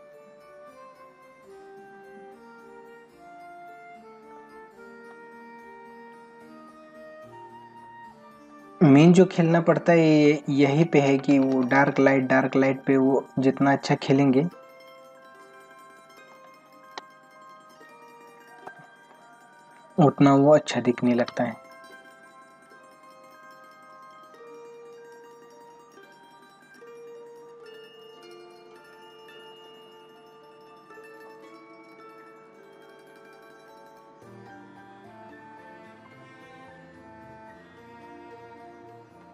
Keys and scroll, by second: 1.1 ctrl+-, 4.3 ], 9.4 ctrl+-, 10.2 space, 11.1 ctrl+alt+z, 12.8 ctrl+-, 13.6 ], 15.2 ], 16.3 space, 18.0 ctrl+-, 18.7 space, 21.2 ctrl+alt+z.